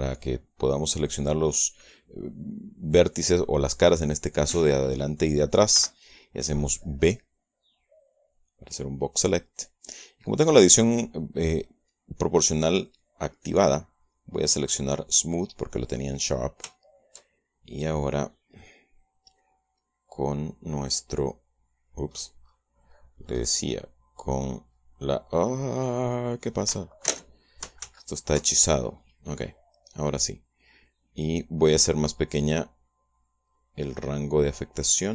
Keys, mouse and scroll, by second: 6.5 b, 7.2-10.5 drag, 14.2 click, 16.0 click, 16.5-18.9 middle drag, 21.9 scroll down 2, 22.9-23.6 scroll up 4, 24.0-24.3 scroll up 2, 24.3-24.9 scroll down 4, 25.0 middle click, 25.0 right click, 26.0 scroll down 1, 26.2 scroll up 2, 26.4 scroll down 2, 26.6-27.0 scroll up 2, 27.0 scroll down 2, 27.0 scroll up 2, 27.4 scroll down 2, 27.5 scroll up 2, 27.7-28.3 scroll down 2, 28.3 scroll up 2, 28.5 ctrl+scroll down 1, 28.6 ctrl+z, 28.6 ctrl+scroll up 1, 28.7 ctrl+scroll down 1, 29.0-29.8 ctrl+scroll up 2, 29.8-30.4 scroll down 1, 30.4 scroll up 1, 31.4 click, 32.3-32.8 scroll up 1, 32.8 scroll down 1, 33.0 scroll up 2, 34.4 scroll up 2.